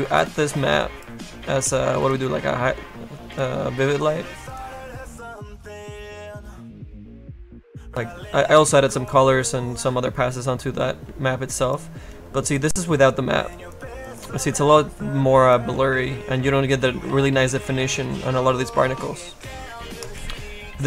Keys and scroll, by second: 0.9 Delete, 11.1 F2, 11.4 space, 12.1 F2, 12.4 space, 13.4 space, 14.9 F1.